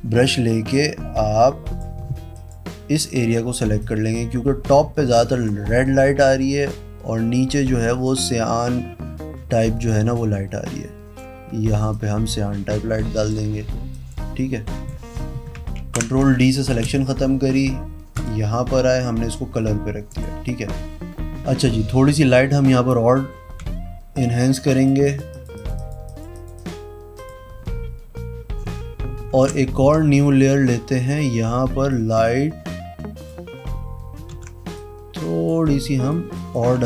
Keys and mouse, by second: 0.2-1.7 drag, 2.3 click, 3.7-5.4 drag, 6.2 p, 7.8 click, 9.3 b, 10.1-11.1 drag, 11.9-13.2 drag, 13.9 click, 14.6 click, 15.8 ctrl+d, 16.8 v, 18.1 click, 20.0 click, 21.6 ctrl+click, 22.5 b, 23.6 b, 24.1 click, 24.6 click, 25.0 click, 25.3 click, 25.8 click, 26.0 click, 26.3 click, 26.5 click, 27.1 click, 29.3 ctrl+shift+n, 29.8 KP_Enter, 31.9 click, 34.3 ctrl+z, 34.7 click, 35.8 click, 36.3 click, 36.7 ctrl+d.